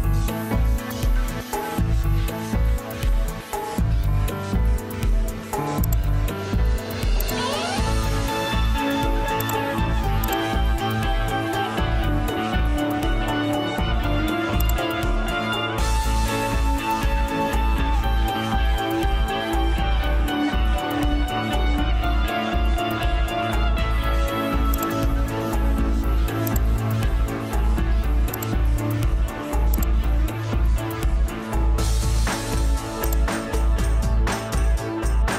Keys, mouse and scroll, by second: 11.6 Return, 16.0 Escape, 30.4 F9.